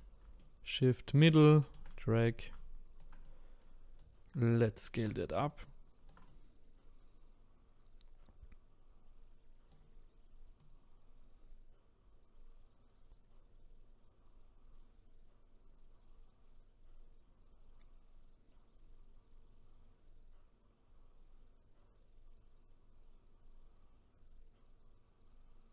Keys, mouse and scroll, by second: 0.8-2.9 middle drag, 2.9-25.7 shift+right drag.